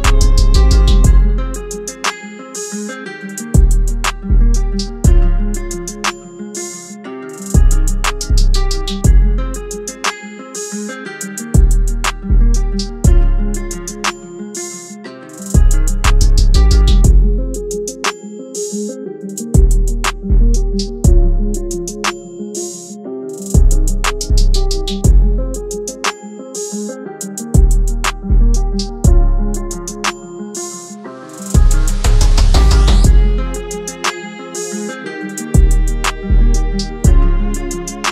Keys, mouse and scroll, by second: 3.6 double click, 27.9-28.8 scroll up 1, 37.3 ctrl+t.